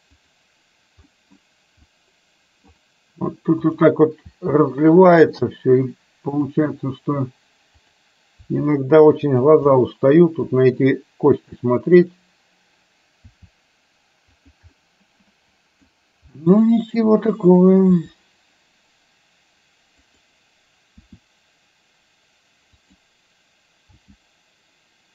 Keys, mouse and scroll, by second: 1.2 middle click, 2.0 middle click, 3.7 click, 4.3 r, 6.5 click, 8.0 click, 8.5 r, 9.7-11.5 middle drag, 12.1 click, 13.2 r, 14.7-16.0 middle drag, 16.5 middle click, 17.7 click, 18.0 r, 24.1 g.